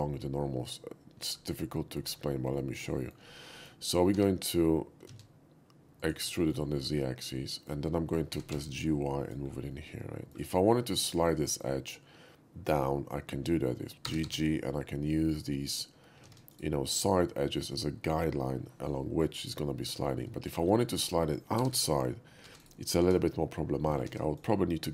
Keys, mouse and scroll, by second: 2.6 middle click, 3.0 shift+middle click, 3.5 shift+middle click, 4.1 e, 5.1 z, 6.0 click, 6.4 shift+middle click, 6.7-7.7 shift+middle drag, 8.3 g, 8.5 y, 9.2 click, 9.7 middle click, 10.5 scroll up 1, 11.1 click, 11.4 shift+middle click, 14.1 g, 14.3 g, 16.2 ctrl+z, 16.5 right click, 20.4 shift+middle click, 20.9 shift+middle click, 21.6 g, 21.8 g, 22.6 right click, 24.1 ctrl+z, 24.4 right click.